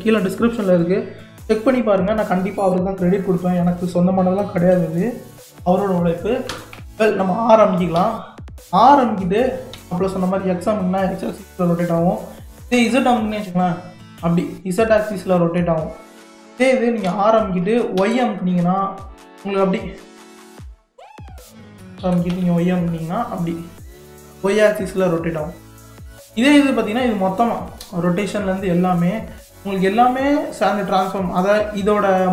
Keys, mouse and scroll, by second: 6.5 r, 7.2 click, 8.0 r, 22.0 r, 26.6-27.7 drag, 30.9 click.